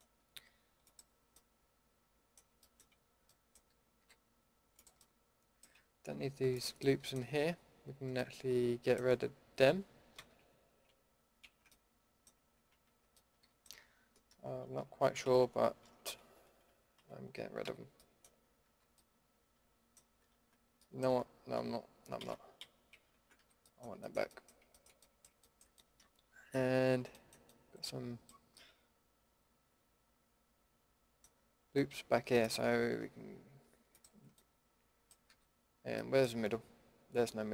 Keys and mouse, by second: 0.8-1.6 middle drag, 2.2-2.8 middle drag, 4.0 a, 4.7-5.5 middle drag, 10.2 ctrl+x, 11.4 ctrl+z, 12.9 ctrl+x, 14.6 ctrl+z, 15.2 ctrl+x, 16.2 ctrl+z, 16.9 ctrl+x, 17.6 a, 18.7 a, 22.2 ctrl+z, 22.6 ctrl+z, 22.9 ctrl+z, 23.4 a, 23.8-24.3 middle drag, 24.8 middle drag, 29.0-30.9 middle drag, 32.4-37.5 drag, 35.3 a.